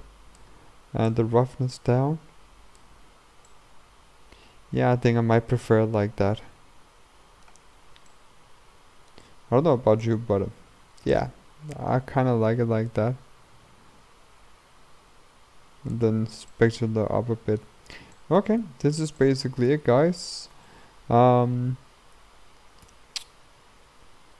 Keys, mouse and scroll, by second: 3.2-3.5 scroll down 1, 3.5-7.5 middle drag, 7.7-8.1 scroll up 2, 8.1-11.3 middle drag, 11.3-14.2 drag, 16.2-16.6 scroll down 1, 16.6-17.9 middle drag, 17.9-18.2 scroll up 2, 18.2 middle click, 18.5-19.2 scroll down 2, 19.2-20.6 middle drag, 20.6 KP_0, 22.9 n.